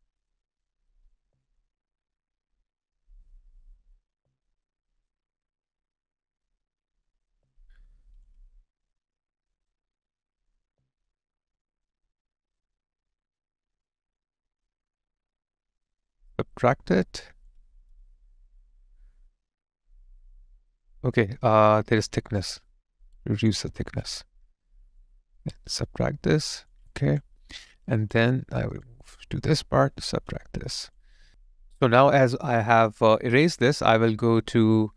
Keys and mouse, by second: 1.1 alt+click, 4.2 alt+middle click, 4.7 alt+click, 7.2 alt+click, 10.5 alt+click, 12.2 alt+right click, 13.1 alt+click, 13.9 alt+right click, 16.6 space, 16.7 alt+click, 26.9 alt+click, 27.4 alt+middle click, 27.9 alt+click, 30.7 space, 31.2 alt+right click, 31.3 alt+click.